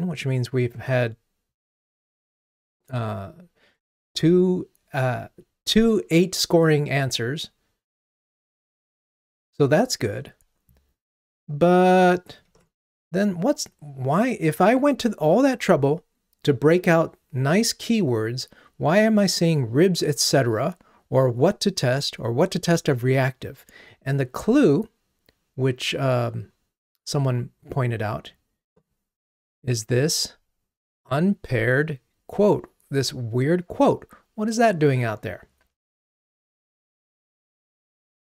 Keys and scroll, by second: 0.9 ctrl+Tab, 9.4 ctrl+Tab, 37.3 ctrl+Tab.